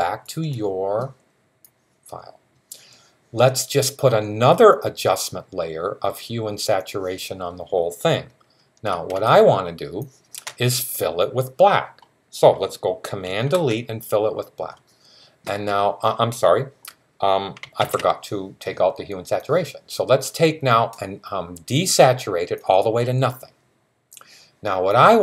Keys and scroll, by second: 17.6 super+z.